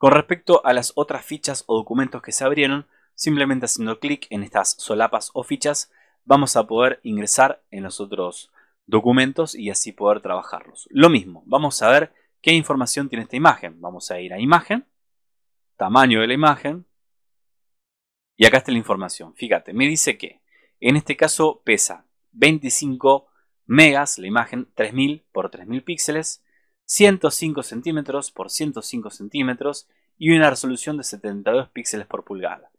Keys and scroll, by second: 19.8 super+-, 19.9 super+=.